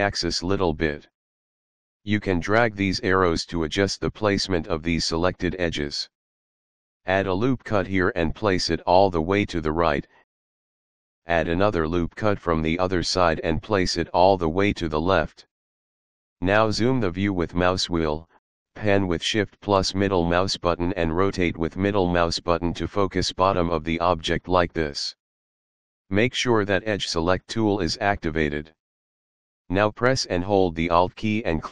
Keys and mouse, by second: 2.2 click, 7.6 ctrl+r, 8.3 click, 10.5 click, 12.5 ctrl+r, 13.5 click, 15.2 click, 16.4 middle click, 18.1 shift+middle click, 20.2 shift+middle click.